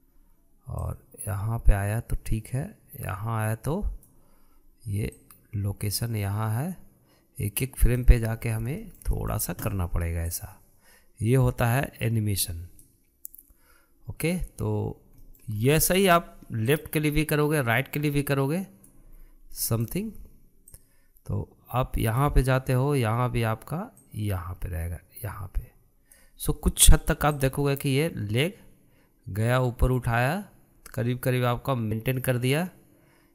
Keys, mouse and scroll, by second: 2.0-5.0 drag, 6.2 click, 9.3-9.8 scroll down 5, 9.8-11.4 shift+middle drag, 11.4-14.3 drag, 16.2-16.6 middle drag, 16.6 scroll up 1, 16.8-17.8 shift+middle drag, 17.8-20.2 drag, 20.2 scroll down 2, 20.6-21.8 shift+middle drag, 21.8-24.7 drag, 25.0 click, 28.5-31.5 drag.